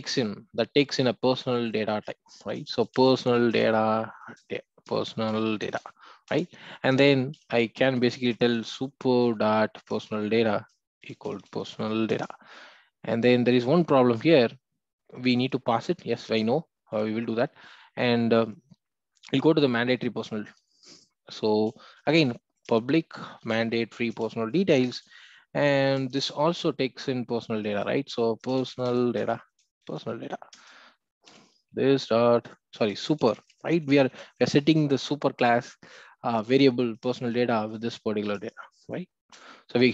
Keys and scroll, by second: 3.5 Return, 13.6 Return, 22.6 Return, 29.2 Return, 36.9 Return.